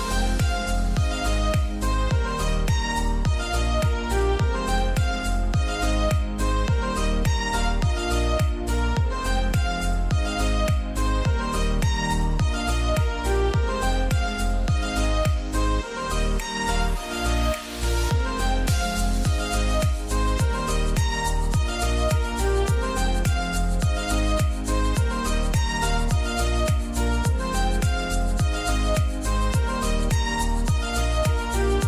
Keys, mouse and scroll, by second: 3.6 click, 6.3-9.6 drag, 10.5 click, 10.8-18.9 drag, 18.9 Left, 24.0 click, 24.4-24.9 scroll up 1, 25.9-31.8 drag.